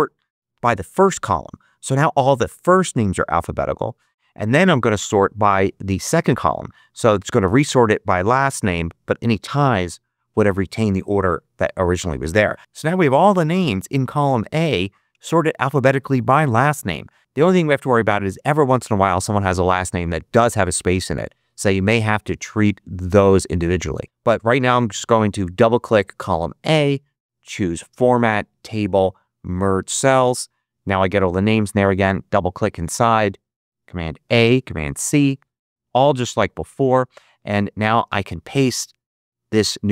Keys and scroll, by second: 34.1 super+a, 34.9 super+c.